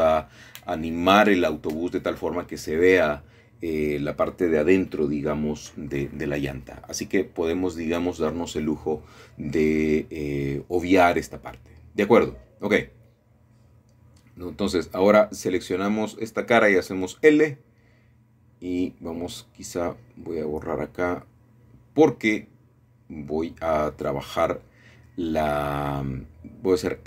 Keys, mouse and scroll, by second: 1.3 middle click, 3.5 middle click, 4.8-6.3 scroll down 3, 6.3 shift+middle click, 7.9-9.9 shift+middle drag, 12.7 middle click, 15.1-16.2 middle drag, 15.4-16.2 scroll up 2, 16.4-17.6 shift+middle drag, 17.6 typing, 19.9-21.7 drag, 23.3 typing, 26.0 click.